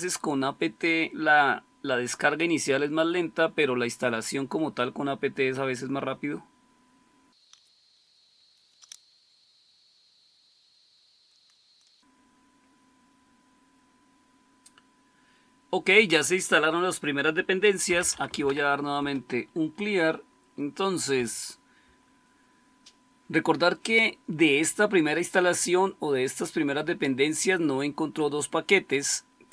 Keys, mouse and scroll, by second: 17.6-19.0 typing, 21.0 Up, 21.8 Up.